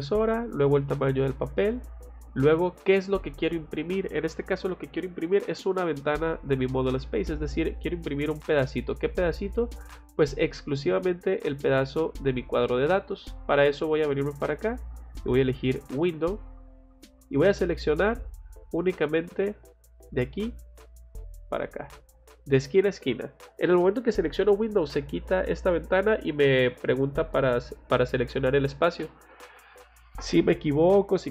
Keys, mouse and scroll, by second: 7.3 click, 12.8 click, 14.3 click, 16.4 click, 17.4 middle click, 17.8 middle click, 20.0 click, 21.9 click.